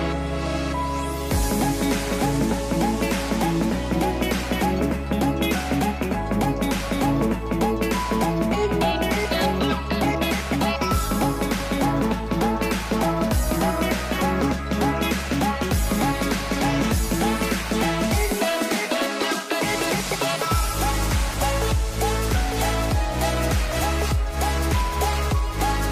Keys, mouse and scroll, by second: 0.9 shift+click, 2.8 shift+click, 4.8 shift+click, 6.7 s, 8.6 ctrl+z, 12.4 s, 14.3 c, 18.1-19.9 middle drag, 19.9 s, 21.8-25.6 middle drag.